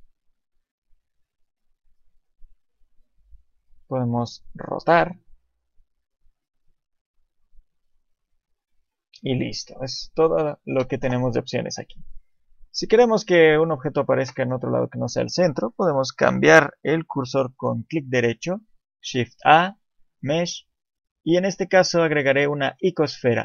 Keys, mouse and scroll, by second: 0.5 click, 2.1 click, 5.6 click, 10.8 Delete, 12.0 shift+middle click, 12.9-14.0 scroll down 1, 14.3 scroll down 1, 19.0 shift+a.